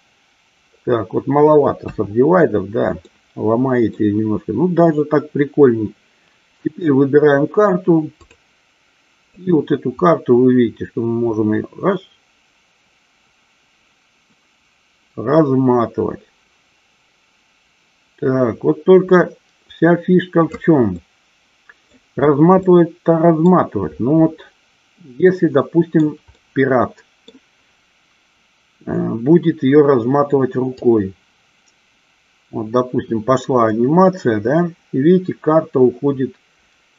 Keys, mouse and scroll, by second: 1.9 KP_1, 3.1-4.1 middle drag, 8.4 click, 9.4-20.6 drag, 21.0-22.0 middle drag, 22.8-23.8 middle drag, 25.4-26.1 middle drag, 26.5-27.4 middle drag, 30.9-36.9 drag.